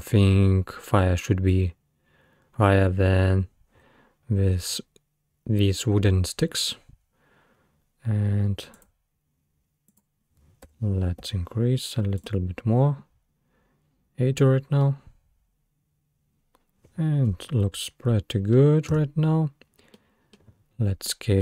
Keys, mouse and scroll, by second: 8.8-11.8 drag, 14.8-17.9 middle drag, 18.9 space, 20.0-21.4 middle drag.